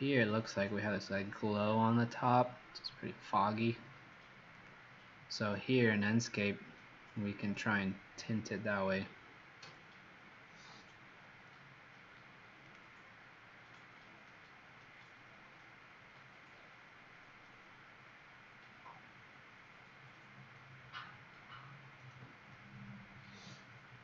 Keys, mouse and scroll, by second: 4.7 click.